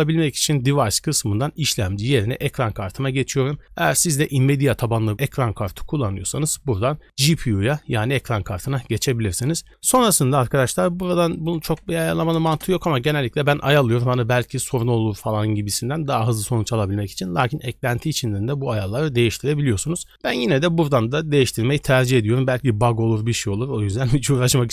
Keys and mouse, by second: 1.1-2.4 drag, 11.3-12.5 drag.